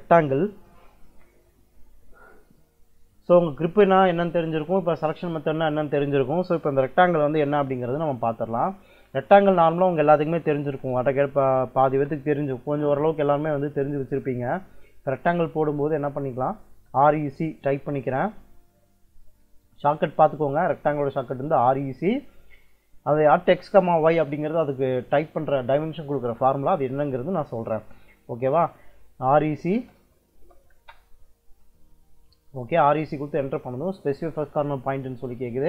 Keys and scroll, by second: 10.5 r, 10.8 e, 11.7 space, 16.0 Escape, 16.6 r, 16.9 e, 18.7 Escape, 29.4-30.6 typing.